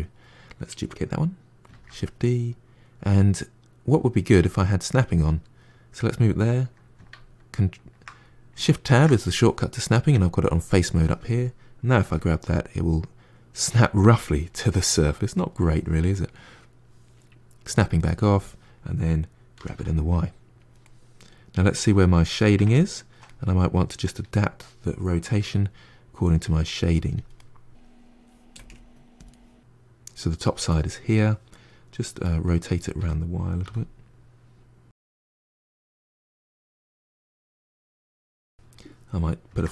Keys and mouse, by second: 1.6 shift+d, 8.8 shift+Tab, 11.9 g, 14.7-17.5 middle drag, 17.5 click, 17.9-19.5 middle drag, 19.5 g, 20.7-25.2 middle drag, 25.2 r, 27.2-28.5 middle drag, 28.5 r, 29.2-32.8 middle drag, 32.8 r, 34.9 middle click, 35.5 g, 35.9 middle click, 36.2 r, 36.8-39.4 ctrl+middle drag, 39.4 shift+d.